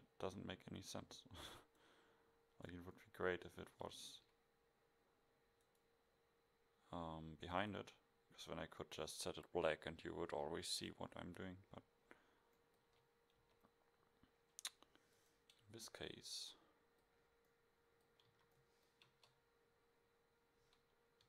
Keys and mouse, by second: 3.0-3.6 middle drag, 4.2 KP_1, 11.8-12.9 middle drag, 12.9 KP_1, 13.4 KP_0, 18.4 a, 19.1 KP_0.